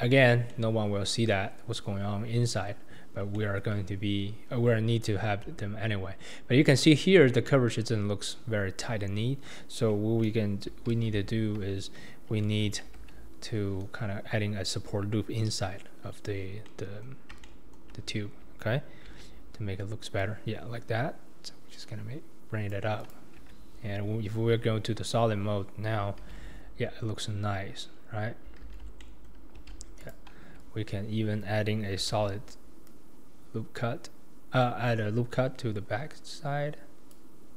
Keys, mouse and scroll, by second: 0.0 Tab, 0.5-3.9 middle drag, 3.9-4.7 scroll up 2, 4.7-5.4 scroll up 1, 10.9 alt+z, 12.4 alt+z, 13.0 Tab, 16.3-16.7 scroll down 2, 16.7-19.1 middle drag, 19.1 ctrl+r, 23.5 Tab, 26.2 alt+z, 26.6-27.7 scroll up 2, 27.7 scroll up 1, 27.9-28.5 scroll down 4, 28.6 alt+z, 29.0 middle click, 29.6 alt+z, 30.0 click, 30.4 Tab, 32.0 ctrl+r.